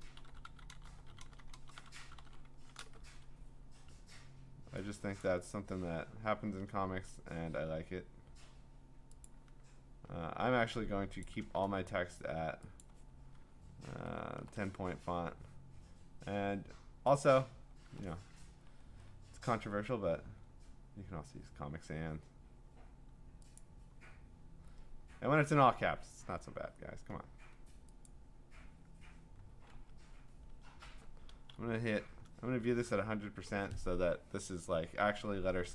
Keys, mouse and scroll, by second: 6.5 click, 9.2 click, 10.7 t, 11.2 click, 11.4 ctrl+a, 12.8 click, 14.1-14.9 typing, 17.2 click, 17.8-19.0 scroll down 20, 19.0-20.2 scroll, 23.6 click, 28.1 click, 29.7-30.5 ctrl+scroll, 31.9 ctrl+0.